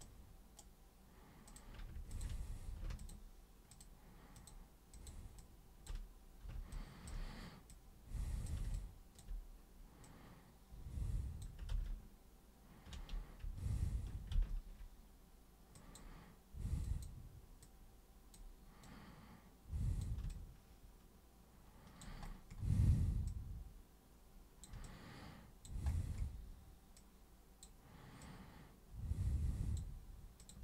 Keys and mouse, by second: 1.4 super+click, 2.1 ctrl+shift+super+click, 2.9 ctrl+shift+super+click, 3.7 ctrl+shift+super+click, 4.3 ctrl+shift+super+click, 4.9 ctrl+shift+super+click, 5.4 ctrl+shift+super+click, 6.7-7.0 ctrl+shift+super+drag, 7.7-8.4 super+drag, 8.7-9.1 alt+super+drag, 10.0 super+click, 15.7 super+click, 16.8 super+click, 17.6-18.3 super+drag, 18.8 super+click, 20.2-22.0 alt+super+drag, 23.2-24.6 super+drag, 24.8 alt+super+click, 26.9 super+click, 28.2 super+click, 30.3 super+click.